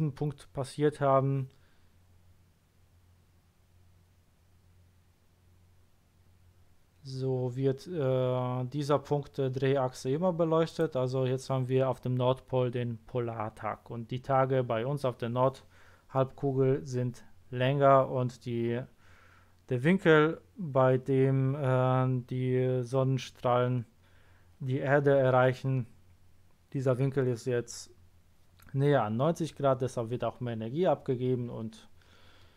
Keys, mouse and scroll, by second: 10.6 click.